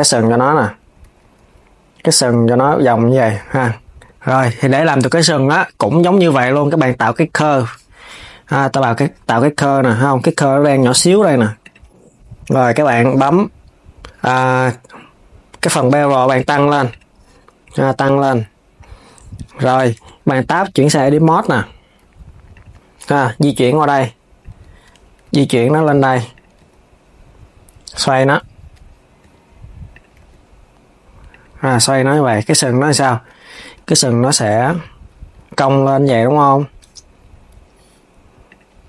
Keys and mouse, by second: 0.2 KP_3, 0.7 s, 3.2 s, 4.7 shift+a, 11.3 click, 15.3-19.6 drag, 19.6 Tab, 20.1 KP_1, 20.6 r, 23.1 click, 24.2 KP_3, 24.9 g, 28.9 r, 29.9 g, 35.2 g, 38.1 click.